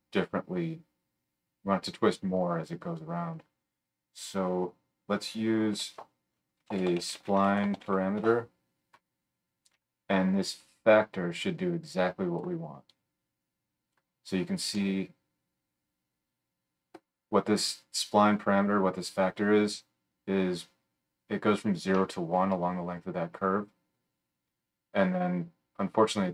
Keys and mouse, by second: 5.7 F3, 9.7-11.4 drag.